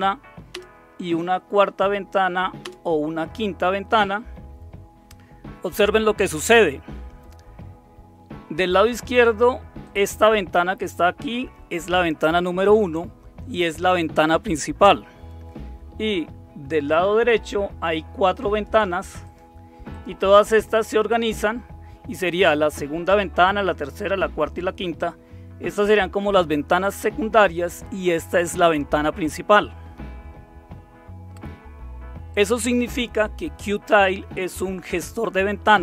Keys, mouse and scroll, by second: 0.5 super+Return, 2.6 super+Return, 9.8 click, 16.9 click, 17.8 click, 18.5 click, 19.2 click, 19.9 click, 20.6 click, 21.2 click, 28.2 click, 32.3 click.